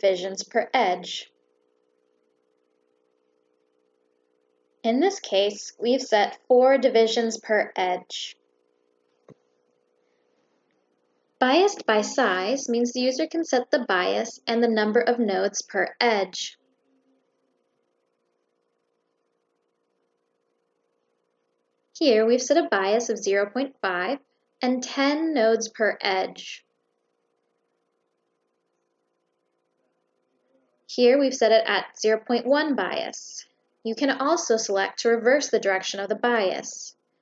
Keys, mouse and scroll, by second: 4.1 click, 9.8 click, 11.1 click, 12.9 click, 15.0 click, 21.0 click, 27.6 click, 30.0 click, 34.0 click, 35.9 click.